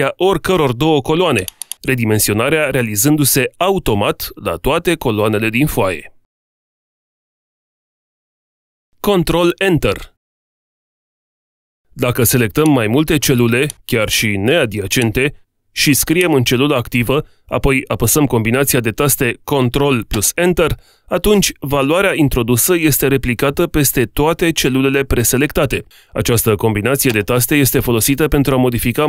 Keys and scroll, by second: 19.7 ctrl+Return.